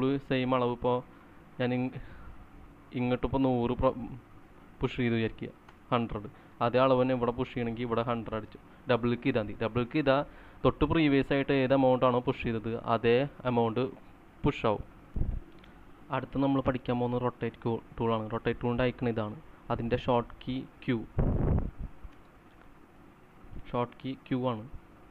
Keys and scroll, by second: 4.2-6.0 typing, 5.7 Return, 10.4-11.1 typing, 15.1 c, 21.3 q, 23.5 typing.